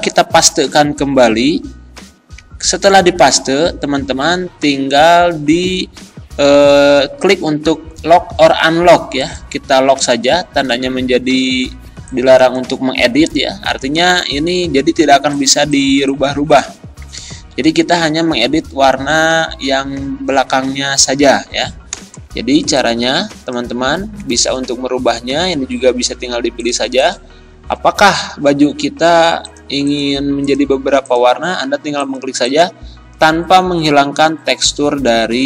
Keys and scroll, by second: 0.4 ctrl+v, 17.4 ctrl+z.